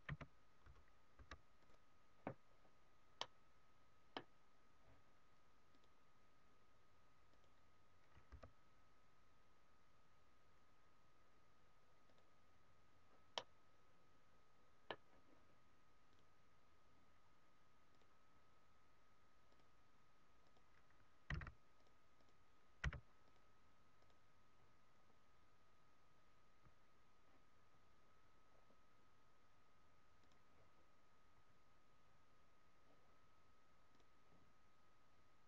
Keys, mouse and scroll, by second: 2.5-3.0 scroll up 2, 3.1 middle click, 4.2-4.8 scroll down 2, 5.7 click, 13.3 middle click, 16.5 click, 24.9 scroll up 1, 28.5-30.1 scroll up 3, 30.1 click, 33.9 click.